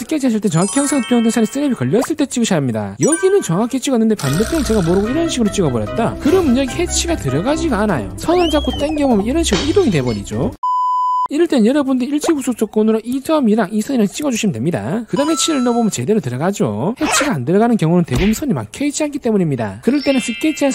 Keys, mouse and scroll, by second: 4.3 click, 7.5 click, 9.2 click, 12.3 ctrl+right click, 12.9 click, 13.8 click, 14.7 click, 16.2 click.